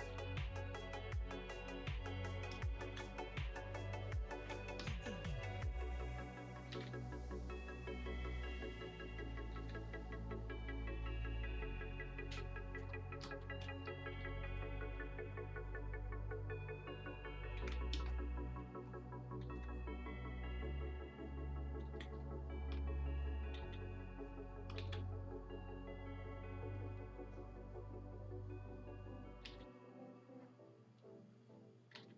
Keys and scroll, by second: 0.2 b, 2.6 ctrl+z, 4.7 Escape, 6.7 ctrl+z, 9.5 ctrl+z, 12.8 space, 13.4 r, 13.9 b, 17.5 ctrl+z, 17.9 Escape, 19.4 ctrl+z, 21.8 ctrl+z, 23.5 ctrl+z, 24.8 ctrl+z, 29.4 ctrl+z, 31.9 ctrl+z.